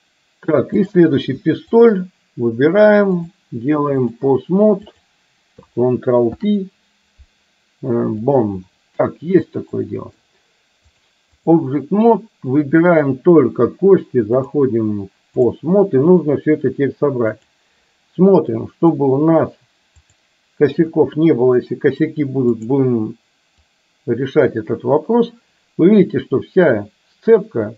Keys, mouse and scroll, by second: 1.0 click, 3.3-4.3 drag, 4.8 click, 6.3 ctrl+p, 9.8 middle click, 11.1 click, 14.6-15.7 drag, 17.5 click, 18.7 middle click, 23.8-27.7 drag.